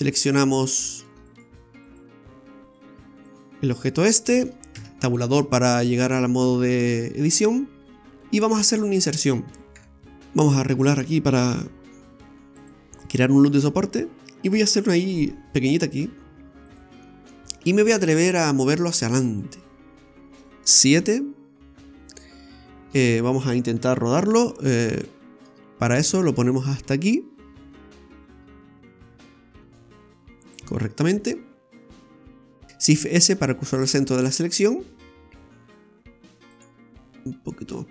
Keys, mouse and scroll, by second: 0.7 shift+middle click, 1.3 right click, 1.9 right click, 2.6 right click, 3.2 right click, 3.6 scroll up 2, 4.1 shift+middle click, 4.7 Tab, 5.7 middle click, 9.7 3, 10.0 |, 17.1 middle click, 21.0 KP_7, 24.9 click, 26.6 click, 30.8-31.2 scroll down 2, 31.2 middle click, 32.7 shift+s, 33.9 s, 37.2 click.